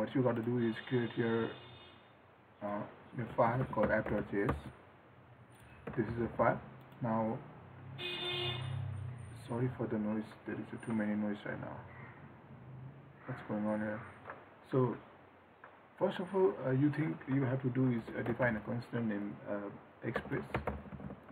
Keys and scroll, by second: 6.0 ctrl+s.